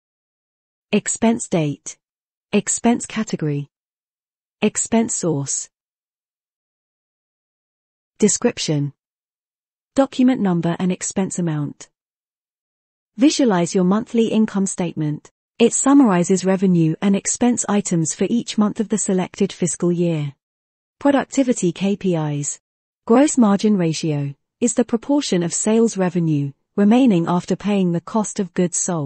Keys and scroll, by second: 2.0 Tab, 4.6 Tab, 8.0 Tab, 8.8 Tab, 10.0 Tab, 11.3 ctrl+Return, 11.8 ctrl+Home.